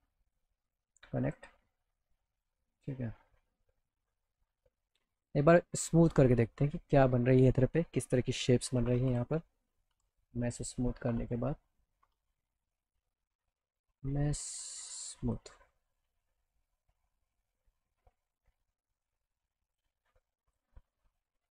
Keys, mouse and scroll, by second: 0.2 click, 0.7 right click, 1.2 click, 3.2 middle click, 5.2 click, 7.3 click, 9.0 m, 15.3 click, 17.0 alt+middle click, 17.3 alt+click, 18.5 scroll up 2, 18.6 scroll down 2, 19.7 click, 20.5 click, 20.9 click, 21.2 click.